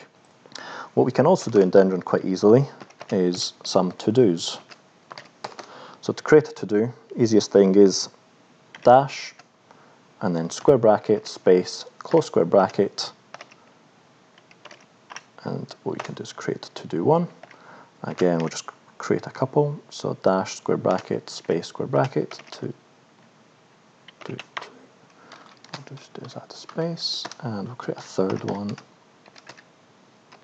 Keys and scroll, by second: 1.4 Return, 1.6 Return, 2.8-5.7 typing, 8.8 -, 9.3 space, 10.7-15.6 typing, 15.8 Return, 17.5 -, 18.1 space, 18.3 [, 21.0-22.8 typing, 24.3 space, 24.6 2, 25.2 Up, 25.2 Left, 26.6 Down, 27.0 End, 27.2 Return, 28.2-30.4 typing.